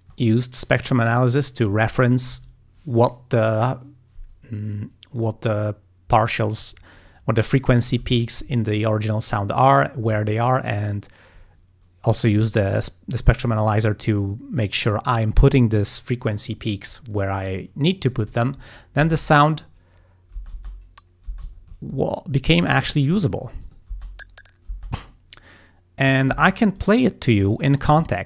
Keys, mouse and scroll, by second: 19.1 space, 20.4 space, 21.5 space, 21.6-22.2 ctrl+scroll down 4, 22.4-23.4 scroll up 7, 23.7 click, 24.0 space, 24.8 space.